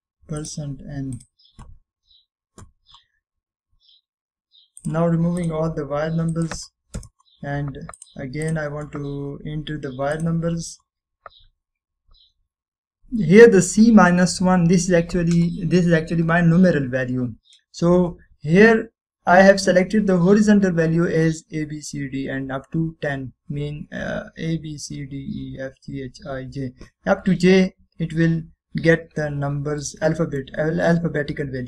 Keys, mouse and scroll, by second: 4.6-5.9 scroll down 2, 5.9 click, 6.6-8.1 drag, 8.1 Return, 9.1-10.1 drag, 13.1 scroll up 1, 15.0-16.7 scroll down 1, 17.0 scroll down 1, 29.1 scroll up 1, 30.3 scroll down 1, 31.0-31.5 middle click.